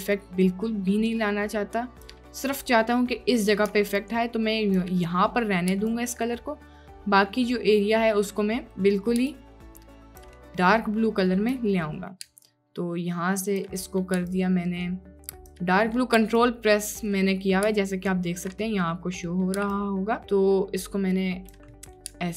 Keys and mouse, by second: 2.3 click, 4.1 ctrl+click, 5.5 click, 6.0 ctrl+click, 8.8 click, 9.4 ctrl+click, 10.4 click, 11.8 click, 12.5 ctrl+click, 13.9 click, 15.8 drag, 18.6 drag, 19.3 click, 19.8-21.6 ctrl+drag, 21.7 click.